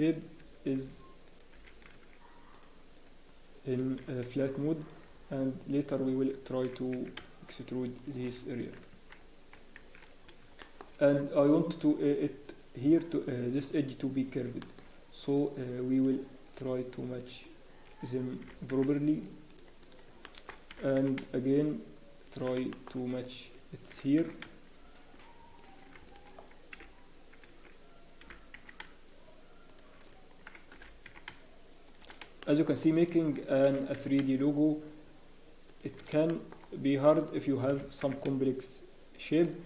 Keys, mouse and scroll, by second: 0.1 click, 0.4 g, 2.9 click, 3.5-4.0 scroll down 1, 4.0 g, 5.1-6.6 scroll down 3, 5.4-6.6 scroll, 6.6-7.2 scroll up 1, 6.6 g, 8.3 scroll down 1, 8.5 Tab, 8.9 Tab, 9.1-9.5 scroll up 1, 9.8 scroll down 4, 9.8 shift+z, 10.2-11.5 scroll up 4, 10.6 shift+middle click, 11.5-13.3 scroll down 1, 14.2 scroll up 1, 14.6 shift+middle click, 14.8 shift+scroll, 14.8 scroll up 2, 20.0 click, 20.0 g, 20.2 shift+middle click, 20.7 g, 22.7 shift+middle click, 23.2 click, 23.9 g, 26.0 click, 26.7 h, 27.4 ctrl+z, 28.2 g, 30.0 click, 30.7 g, 32.4 shift+middle click, 32.7 shift+scroll up 1, 33.0 click, 33.6 g, 36.3 shift+middle click, 37.0 click, 37.7 g.